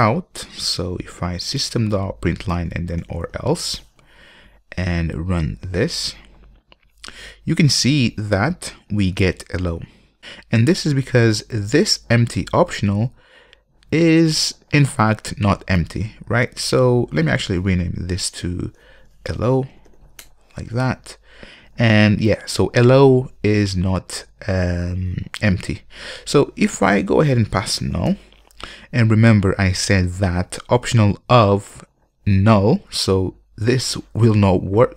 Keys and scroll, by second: 1.8 Return, 5.5 ctrl+F5, 18.9 shift+F6.